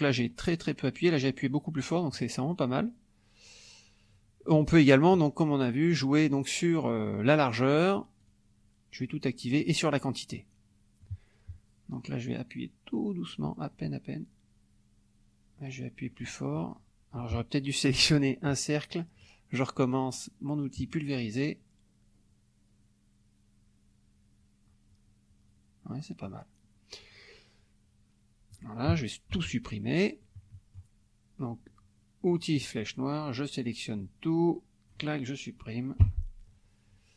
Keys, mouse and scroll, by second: 2.2 click, 2.5-4.3 drag, 4.5 click, 5.9 click, 8.2 click, 9.9 click, 10.4 middle click, 13.1-16.4 drag, 17.2 F1, 18.5 click, 20.8 click, 22.3-26.0 drag, 26.5-27.0 scroll up 1, 27.1-27.4 scroll up 1, 27.5 click, 28.9 KP_Subtract, 29.3 F1, 29.8 click, 30.5 click, 32.3 click, 33.6-35.2 drag, 36.1 Delete.